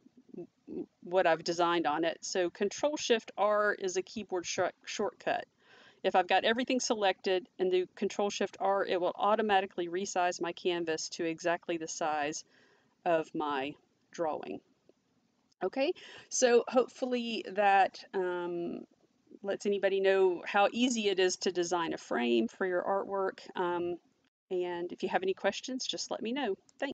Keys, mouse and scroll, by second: 4.1 ctrl+shift+r, 26.7 click.